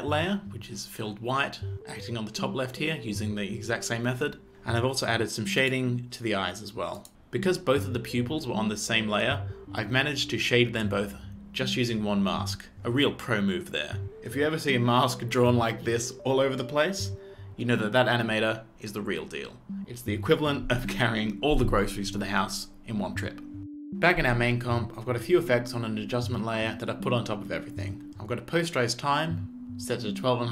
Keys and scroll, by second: 23.9 space.